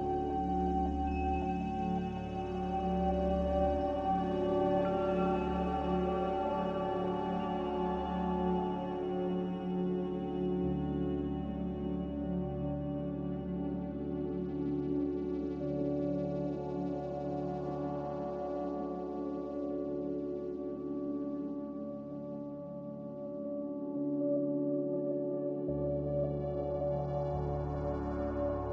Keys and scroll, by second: 0.6 z, 5.2-6.8 typing, 8.5 Tab, 9.3-10.0 typing, 11.3-13.0 typing, 24.6 x, 25.9-26.9 typing.